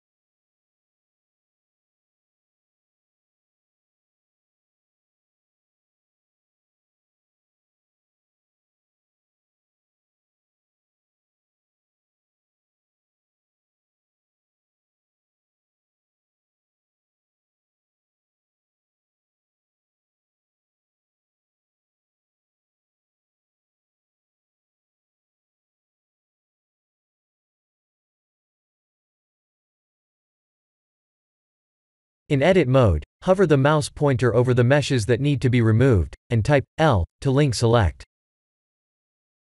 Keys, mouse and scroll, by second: 5.6 shift+click, 8.5 shift+l, 10.3 KP_1, 11.2-12.3 scroll up 6, 12.3-12.9 scroll up 1, 13.2 shift+middle click, 13.7 shift+middle click, 14.1 scroll up 2, 15.6 shift+click, 18.9-20.1 scroll down 2, 20.1-20.6 scroll down 4, 20.5 middle click, 21.2-21.6 scroll down 3, 22.8 click, 23.2 click, 23.7 click, 24.2 click, 26.2 click, 29.5 scroll up 2, 31.2 ctrl+a, 31.8 shift+middle click, 32.2 shift+middle click, 33.0 Tab, 33.5 click, 36.0 click, 36.8 ., 37.0 ., 37.6 click, 37.9 middle click, 39.2 Tab.